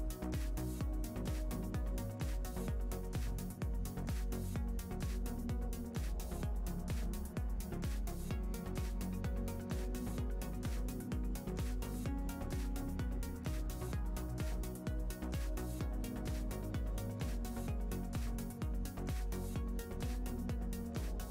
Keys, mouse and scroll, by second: 0.3 scroll up 1, 0.5 click, 0.7 shift+middle click, 1.5-5.0 drag, 4.7 scroll down 1, 5.1-6.3 middle drag, 5.5 scroll up 2, 6.3 click, 9.9 click, 10.8 scroll down 1, 11.0 scroll up 1, 11.2 middle click, 11.5 scroll down 1, 11.6 click, 11.7-14.4 middle drag, 12.2 scroll down 1, 12.8 KP_0, 13.0 scroll down 1, 13.7 click, 14.2 scroll down 1, 14.4 g, 15.4 click, 15.5-15.8 scroll, 15.8 z, 17.0-20.9 scroll.